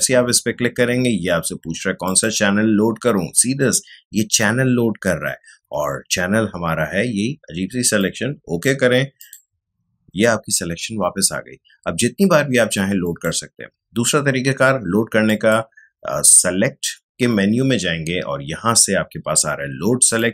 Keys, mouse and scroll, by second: 7.9 click, 13.0 click, 20.0 click.